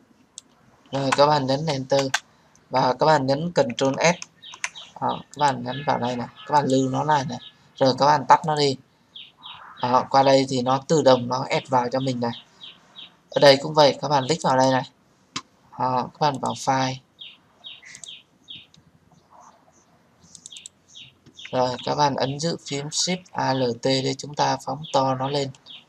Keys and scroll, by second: 1.6 Return.